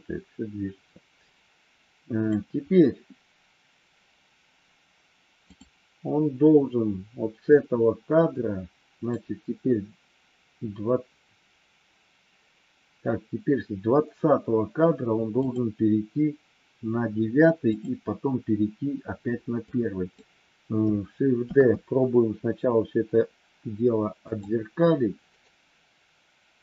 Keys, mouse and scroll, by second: 5.4 click, 7.4-9.0 drag, 15.4 click, 17.8 click, 19.5 click, 21.4 shift+d, 25.4-26.6 right drag.